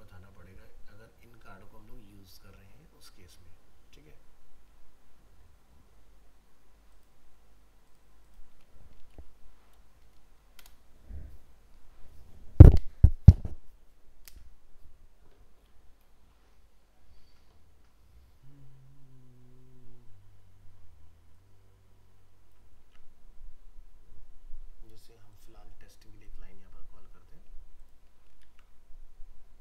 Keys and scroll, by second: 22.8 ctrl+c, 28.2 ctrl+a, 28.4 ctrl+v.